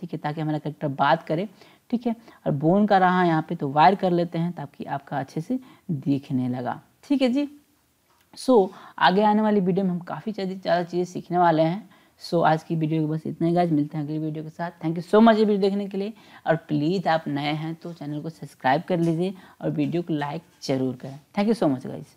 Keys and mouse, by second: 2.5-3.9 drag, 6.7-7.8 drag.